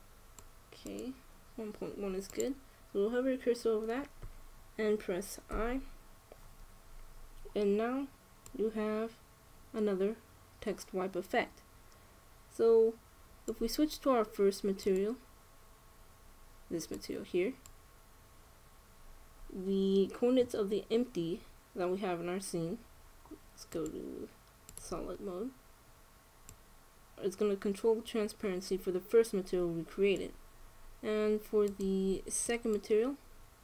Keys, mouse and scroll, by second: 1.5-3.3 drag, 6.2 i, 9.3-11.0 drag, 15.5-17.3 drag, 24.4-26.2 drag, 27.2-29.1 drag, 32.4-33.6 drag.